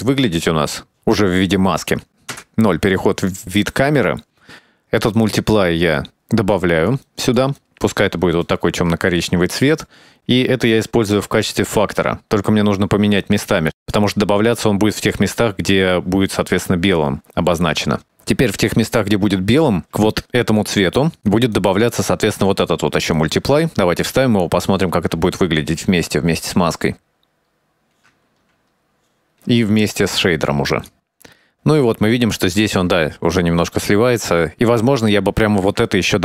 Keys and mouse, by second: 0.4-0.7 middle drag, 1.1-1.6 middle drag, 2.3 KP_0, 3.5 middle click, 4.4 click, 4.6 shift+d, 5.8 click, 9.1 click, 9.7 middle click, 10.7-12.8 drag, 13.3 click, 14.0-14.4 drag, 14.6 click, 14.8 click, 15.5 shift+middle click, 16.2-17.4 drag, 17.5 click, 17.7 click, 21.7 ctrl+shift+click, 23.3-24.9 drag, 27.0-27.5 drag, 27.7 click, 27.9-29.2 drag, 29.3 ctrl+shift+click, 29.5 click, 31.5 shift+middle click, 34.6-35.0 shift+middle drag, 36.0 middle click.